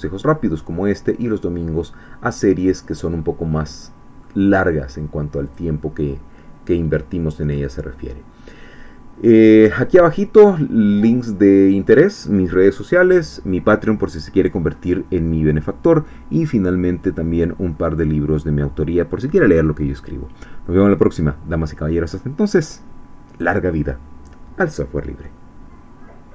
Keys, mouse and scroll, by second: 0.3-4.4 middle drag, 4.4-4.8 scroll down 1, 5.4 click, 7.5-10.7 middle drag, 10.8-11.2 scroll up 1.